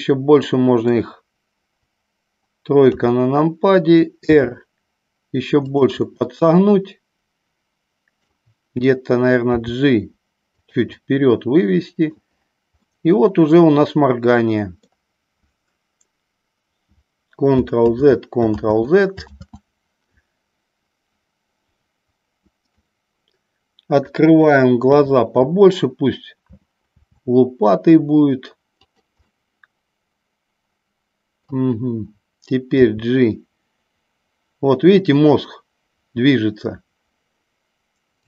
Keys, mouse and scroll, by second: 3.0 KP_3, 4.5 r, 5.8 click, 6.1-8.3 middle drag, 9.6 g, 10.7 click, 11.0 scroll up 1, 11.2 middle click, 13.0-15.0 middle drag, 18.2 ctrl+z, 18.8 ctrl+z, 19.6 ctrl+z, 22.8-24.6 middle drag, 24.9 KP_3, 27.1 r, 29.0 click, 29.4-31.6 middle drag, 32.9 g.